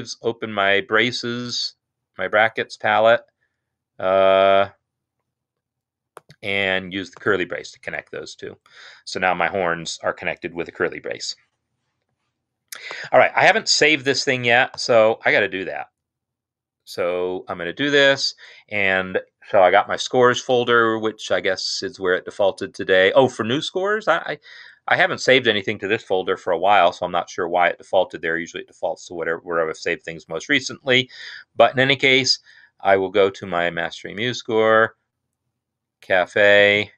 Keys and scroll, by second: 14.8 ctrl+s.